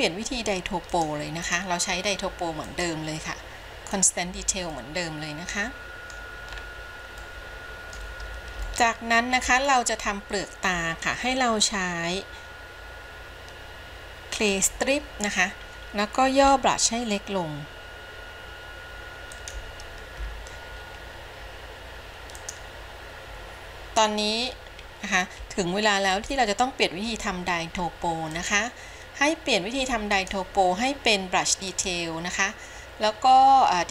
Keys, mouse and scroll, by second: 1.0 click, 1.6 click, 2.8-4.1 drag, 4.9-6.3 middle drag, 6.7 scroll up 2, 7.4 middle click, 8.9 shift+middle click, 9.8 scroll up 2, 14.6 click, 16.5 f, 28.4-33.9 drag.